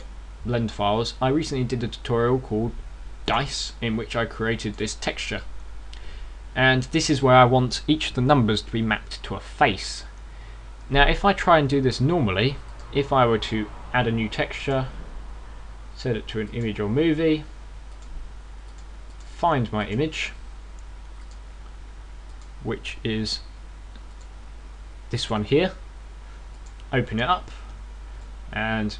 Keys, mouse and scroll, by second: 15.4 click, 18.8 click, 19.5 click, 19.9 click, 27.5 click.